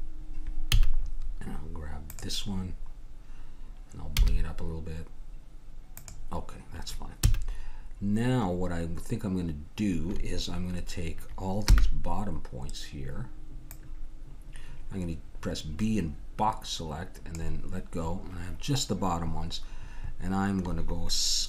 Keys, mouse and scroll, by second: 0.7 a, 2.0-3.9 drag, 2.7-4.7 middle drag, 4.1 g, 7.2 a, 11.7 b.